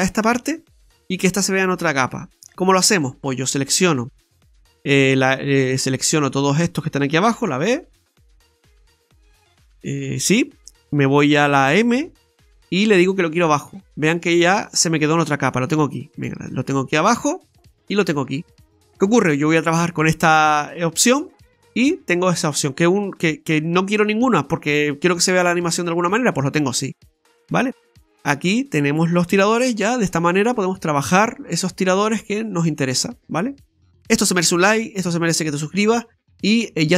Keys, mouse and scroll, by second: 3.5 right click, 7.5 b, 12.0 m, 16.1 click, 17.8 click, 21.5 scroll up 1, 21.8 shift+middle click, 23.3 click, 24.7-25.1 scroll down 2, 25.1 middle click, 27.6 click, 28.6 right click, 29.5 r, 31.2 right click, 31.3 right click, 31.3 r, 32.4 right click, 33.9 right click, 34.0 middle click, 34.0 scroll down 2, 36.5 middle click.